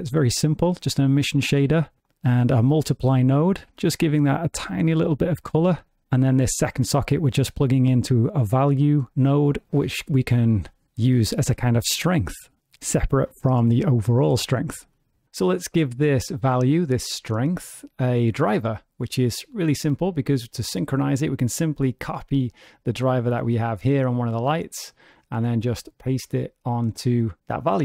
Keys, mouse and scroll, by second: 19.6-21.0 scroll up 8, 21.0 click, 22.5 right click, 24.7 click, 26.2 right click.